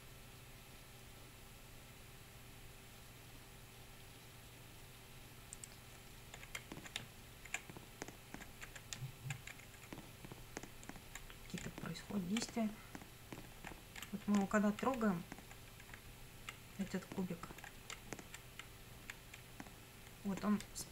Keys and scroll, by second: 6.6 Up, 7.0 Right, 7.5 Up, 8.4 Left, 8.7 Up, 9.0 Right, 9.4 Up, 9.6 Left, 9.8 Up, 11.7 Down, 12.6 Up, 13.8 Left, 14.0 Down, 14.5 Left, 15.0 Up, 16.1 Left, 16.9 Up, 17.7 Left, 18.0 Down, 18.4 Left, 19.4 Up, 20.7 Down.